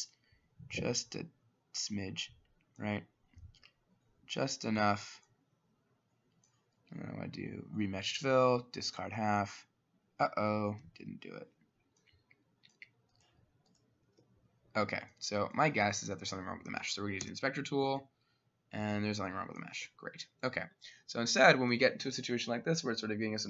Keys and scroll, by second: 10.9 ctrl+z, 14.3 Escape, 14.7 Escape, 17.3 i, 19.8 Escape.